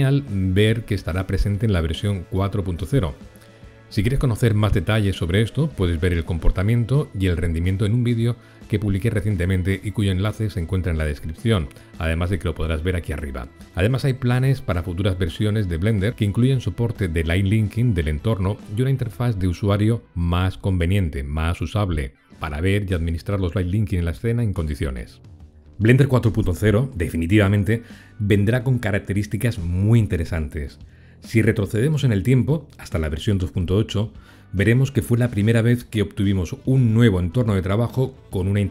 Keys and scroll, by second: 1.9 ctrl+l, 20.3 ctrl+l.